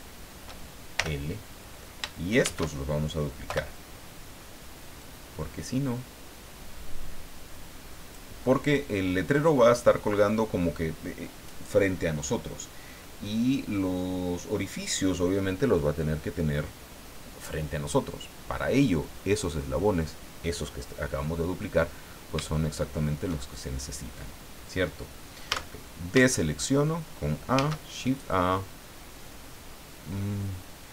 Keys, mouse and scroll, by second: 1.0 l, 2.4 shift+d, 3.5 Return, 5.0-8.3 drag, 22.1 scroll down 2, 22.5 shift+middle click, 25.5 a, 25.9 scroll down 1, 26.3 shift+middle click, 27.5 shift+a.